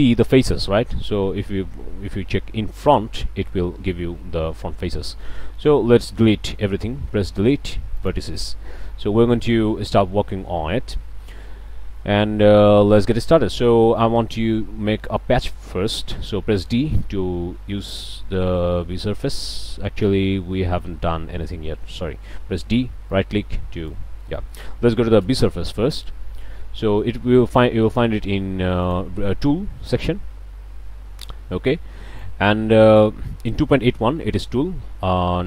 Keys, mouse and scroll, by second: 2.8 click, 3.3 middle click, 3.4-4.1 drag, 4.5-5.0 drag, 5.2-5.8 drag, 5.7 a, 7.4 Delete, 8.0 click, 8.4-9.7 drag, 11.3 scroll up 1, 11.7-12.2 shift+drag, 12.3 shift+scroll up 2, 12.5 middle click, 12.7 shift+click, 13.0 shift+scroll up 2, 13.3 shift+click, 13.5 click, 14.9-15.4 middle drag, 16.6 d, 16.9-19.8 drag, 20.6 ctrl+z, 21.1 ctrl+click, 22.4 d, 23.1 click, 24.2-24.7 drag, 25.2 n, 26.9-27.3 scroll up 2, 28.8-29.1 drag, 31.3-32.4 drag.